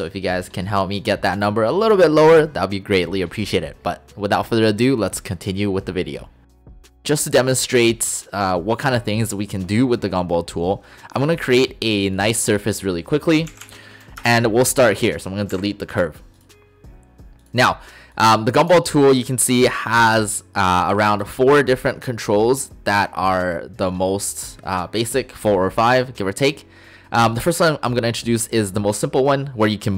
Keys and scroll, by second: 13.5 typing, 14.2 Return, 15.5 Delete, 15.5 End.